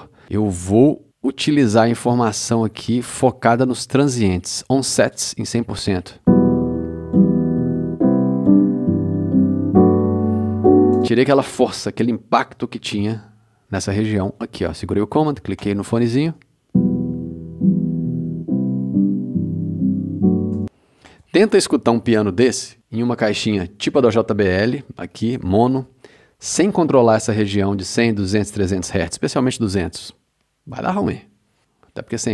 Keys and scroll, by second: 5.8 space, 11.0 space, 16.2 super+space, 17.0 space, 20.5 space.